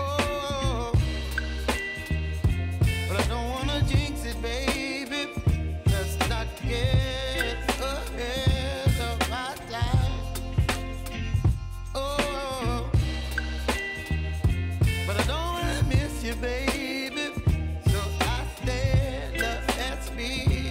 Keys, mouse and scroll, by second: 1.7 click, 2.7 Up, 5.9 Down, 6.8 u, 7.8-10.6 drag, 12.0 click, 12.2 F9, 12.7 click, 13.5 alt+click, 14.0-15.2 typing, 15.5 Down, 16.0 Return, 17.2 click, 17.4 space, 19.8 click, 20.2 space.